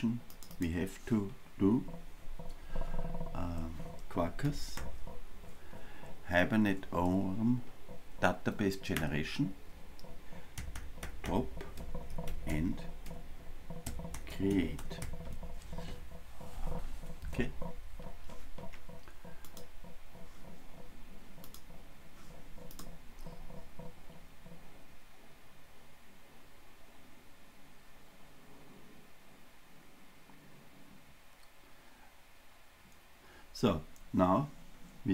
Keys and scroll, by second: 9.0 Return, 21.7 ctrl+r.